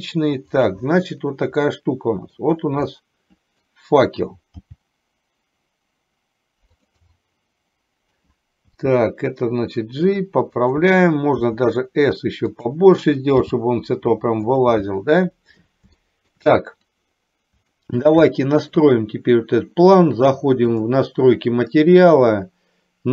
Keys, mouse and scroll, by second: 1.8 middle click, 3.0 scroll up 1, 3.2 middle click, 4.7 g, 7.2-8.2 middle drag, 8.8 g, 11.6 s, 13.6 g, 16.1 shift+middle click, 18.0 shift+middle click, 18.3 middle click.